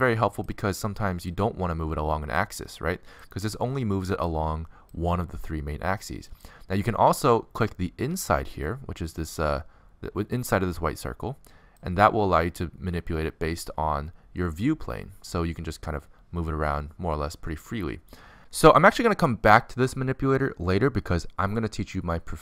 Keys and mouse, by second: 0.6-2.3 drag, 2.3-3.8 middle drag, 3.8-5.6 drag, 5.6 middle click, 6.2-8.0 drag, 11.8-13.6 drag.